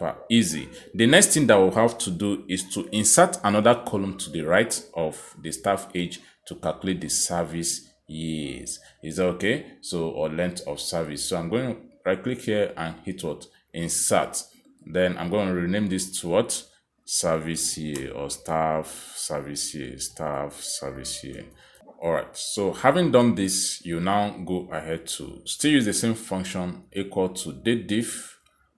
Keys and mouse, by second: 0.2 click, 1.5 click, 3.1 click, 5.6 click, 9.9 click, 10.7 click, 11.6 right click, 13.4 click, 15.2 click, 16.3 click, 17.6 typing, 19.3-20.7 typing, 22.1-24.1 typing, 25.7-27.5 typing.